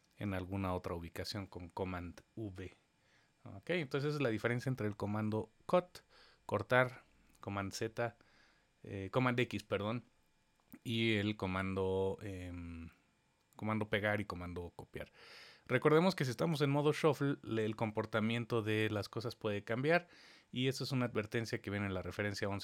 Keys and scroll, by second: 0.1 super+v.